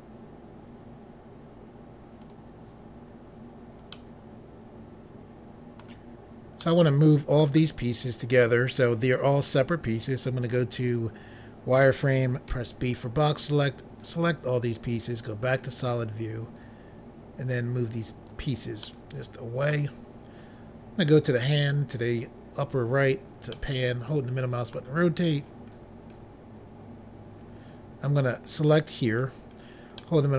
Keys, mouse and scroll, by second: 3.9 middle click, 6.6 middle click, 10.4 click, 12.4 b, 13.2 click, 15.4 click, 16.6 click, 18.8 middle click, 21.4 click, 23.5 middle click, 25.3-26.9 scroll up 3, 28.2 click, 28.8-30.0 scroll down 2, 30.0 middle click.